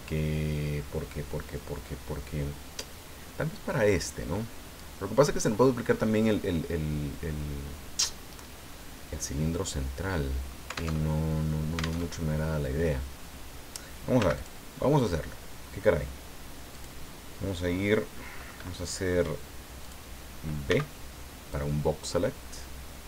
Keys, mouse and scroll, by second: 10.9 alt+Tab, 12.0 alt+Tab, 14.2 x, 14.3 click, 16.7 click, 19.8 click, 20.7 b, 21.5-23.0 drag.